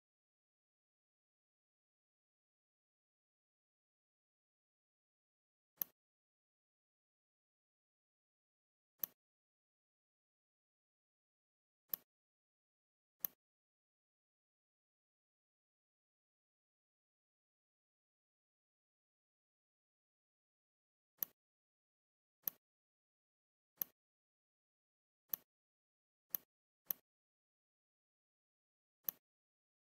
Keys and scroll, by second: 2.6 ctrl+f, 14.1 Up, 14.8-16.7 typing, 17.2 Up, 17.5 Up, 17.7 Up, 18.2 typing, 19.0 Up.